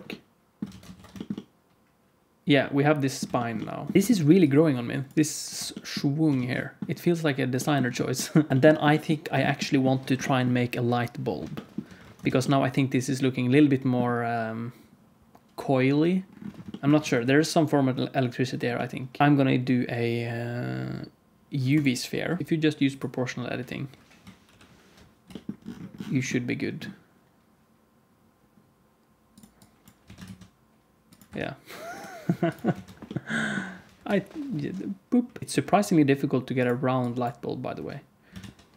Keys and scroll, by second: 0.6 alt+a, 0.9 ctrl+s, 3.9 alt+shift+z, 4.2 d, 5.0 d, 5.1 d, 5.4 d, 6.3 alt+shift+z, 8.5 ctrl+shift+s, 12.3 ctrl+s, 17.2 ctrl+s, 19.2 shift+a, 24.4 alt+o, 25.2 g, 30.0 s, 31.2 Tab, 32.6 alt+z, 33.9 KP_1, 34.1 Tab, 34.5 alt+z, 35.4 s, 37.7 Tab, 38.3 shift+a.